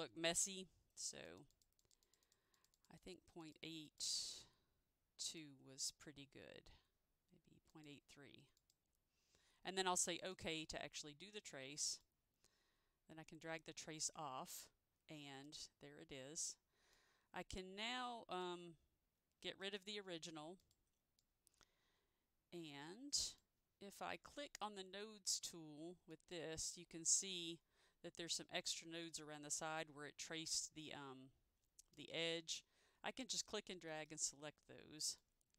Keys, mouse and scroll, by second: 1.6 double click, 1.9 click, 2.3 click, 2.7 double click, 3.1 double click, 3.5 click, 4.0 double click, 5.4 click, 7.8 click, 8.7 click, 12.2 click, 15.6 click, 17.1 click, 19.6 Delete, 20.7 click, 21.3 click, 26.2 click, 31.0 click, 33.9 Delete.